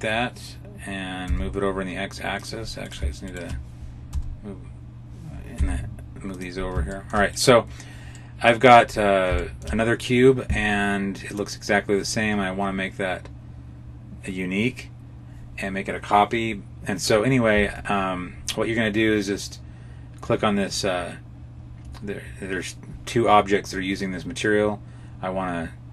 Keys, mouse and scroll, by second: 2.8 right click, 3.2 shift+right click, 4.0 g, 6.8 shift+middle click, 7.2 right click, 8.0 middle click, 8.8-9.1 scroll up 2, 9.3 shift+middle click, 11.2 click.